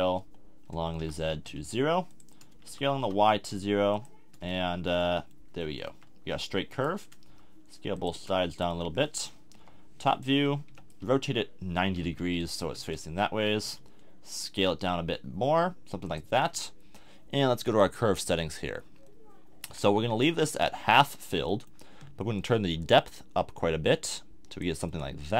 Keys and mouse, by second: 2.6 s, 4.3 click, 4.9 middle click, 5.9 a, 6.7 middle click, 7.3 s, 9.0-10.5 middle drag, 9.5 KP_7, 10.7 r, 13.6 s, 19.0 click, 19.1 middle click, 22.8-24.9 middle drag.